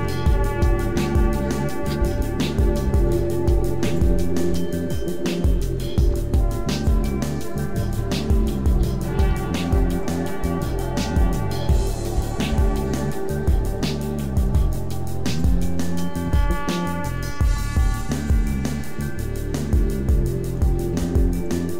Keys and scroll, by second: 0.2 shift+space, 0.8 Tab, 1.0 Tab, 1.3 Tab, 1.9-4.4 typing, 3.0 Tab, 6.0 KP_7, 6.4 Tab, 8.3-12.4 typing, 16.3 s, 20.6 Tab, 20.8 a.